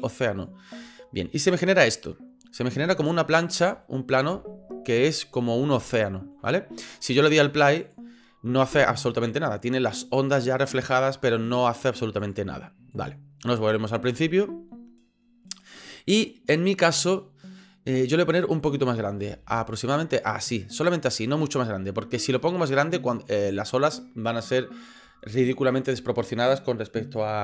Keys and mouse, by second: 2.7-3.6 middle drag, 3.8-4.2 shift+middle drag, 4.5-5.0 ctrl+middle drag, 5.9-6.3 ctrl+middle drag, 12.2 click, 12.9 click, 19.3 s, 20.9 s.